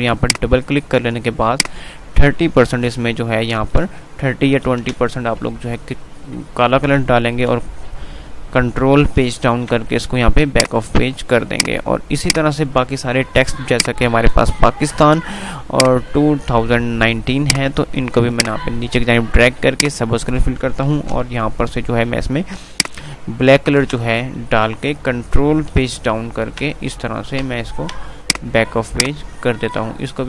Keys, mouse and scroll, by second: 3.6 BackSpace, 7.6 ctrl+Page_Down, 7.7 typing, 10.6 click, 11.0 F3, 11.7 click, 12.0 F2, 12.2 click, 12.6 F2, 13.9 click, 15.7-18.4 drag, 18.4 right click, 20.0 click, 21.0 F11, 22.9 click, 26.0 ctrl+Page_Down, 27.4 ctrl+Page_Down, 28.4 click, 29.9 ctrl+Page_Down.